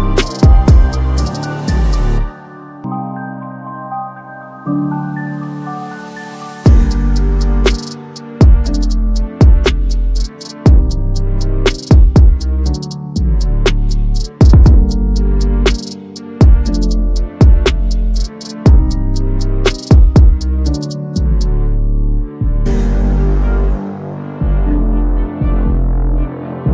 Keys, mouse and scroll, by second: 1.1 9, 1.5 click, 3.6 click, 3.9-4.8 typing, 4.9 click, 6.1 click, 8.1 click, 9.1 click, 9.6-10.9 typing, 10.6 click, 11.4 click, 12.5 click, 12.8-14.0 typing, 14.3 click, 15.6 click, 16.3 click, 17.7 click, 20.9-21.3 drag, 22.2-22.6 drag, 24.7 click, 25.4 click.